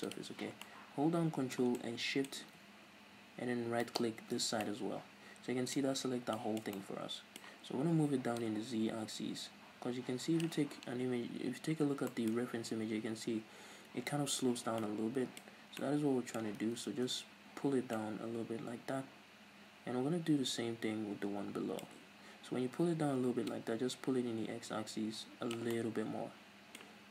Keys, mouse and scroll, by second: 0.1 click, 0.7-3.9 middle drag, 3.9 ctrl+shift+right click, 4.0 middle click, 4.5 scroll down 2, 4.7-8.4 middle drag, 8.4-12.1 drag, 11.1-12.1 scroll up 2, 12.1-23.5 middle drag, 15.5 scroll up 2, 16.6 ctrl+z, 23.5-25.7 drag, 25.7-27.1 middle drag.